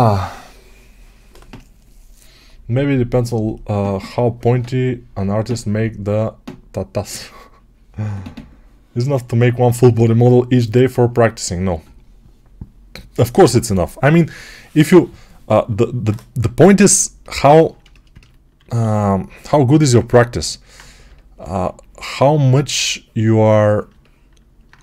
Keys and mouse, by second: 18.4 alt+q, 19.8 ctrl+Tab, 19.8 ctrl+middle click, 21.4 2.